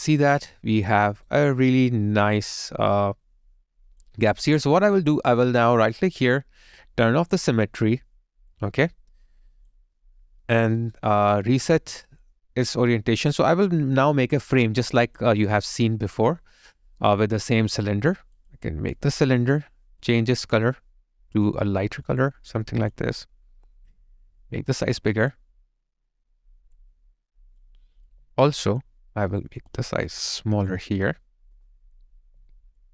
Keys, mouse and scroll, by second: 1.1 alt+right click, 3.0 alt+click, 4.3 alt+middle click, 4.6 alt+click, 6.3 right click, 10.8 alt+right click, 14.9 alt+click, 15.5 alt+middle click, 16.3 alt+click, 28.1 alt+click, 32.2 alt+right click, 32.5 alt+click.